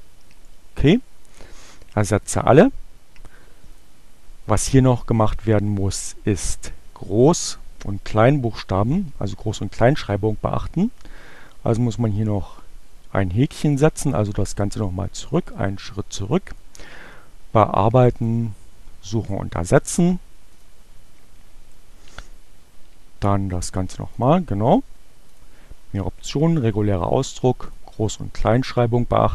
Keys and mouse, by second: 1.2-2.3 drag, 3.6 click, 13.5 click, 15.1 click, 16.4 click, 18.2 click, 20.6 click, 21.0 shift+4, 23.8 click, 25.3 click, 27.5 click.